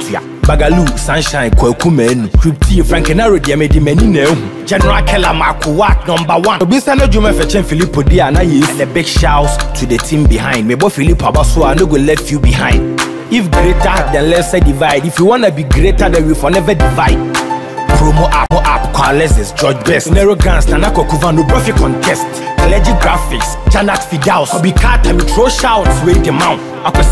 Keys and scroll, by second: 2.0 Return, 9.8 ctrl+t, 13.8 Return, 18.1 Up, 18.8 Right.